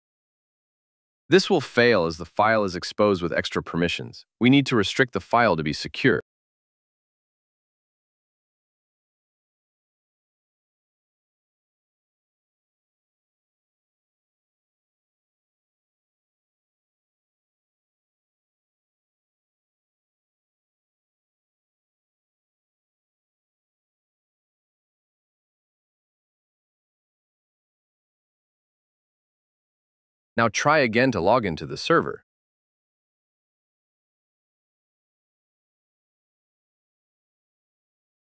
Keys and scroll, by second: 7.9 BackSpace, 11.5 shift+~, 12.7 shift+d.